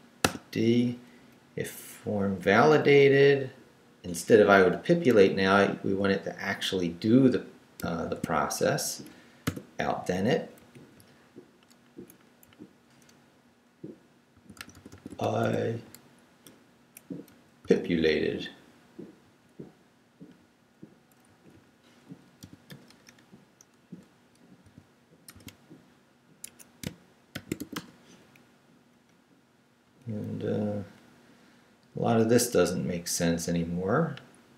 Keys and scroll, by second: 0.1 Down, 0.2 d, 0.7 Up, 5.1 p, 6.1 Left, 8.0 shift+v, 8.5 shift+Down, 9.4 shift+,, 10.3 shift+Down, 10.9 Right, 12.4 Right, 14.3 x, 15.8 Right, 17.3 Left, 17.6 d, 19.2 Right, 22.4 i, 22.7 BackSpace, 24.6 i, 25.3 BackSpace, 25.3 d, 26.4 Escape, 27.1-28.1 typing, 28.9 Up, 29.8 Down, 31.4 Left, 33.5 Left.